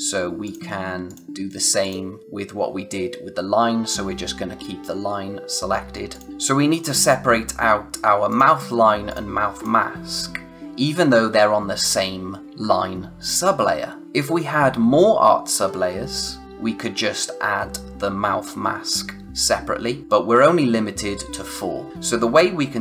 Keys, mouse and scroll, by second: 5.4 click, 6.3-7.1 scroll up 1, 8.2 click.